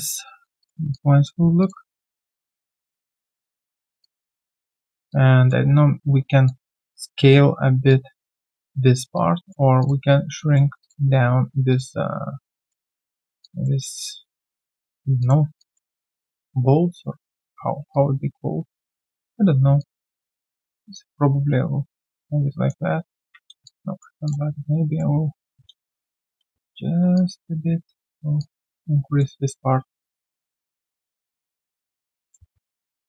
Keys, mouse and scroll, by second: 0.2 alt+click, 0.9 alt+click, 4.4 alt+middle click, 5.1 alt+click, 7.8 alt+click, 9.1 alt+click, 15.2 ctrl+click, 15.6 alt+click, 17.9 typing, 17.9 alt+click, 19.2 typing, 20.9 alt+click, 23.1 ctrl+z, 23.6 alt+click, 24.6 right click, 26.0 shift+click, 26.1 shift+double click, 26.4 w, 28.4 alt+click, 29.3 alt+right click, 30.5 alt+right click, 32.2 alt+click.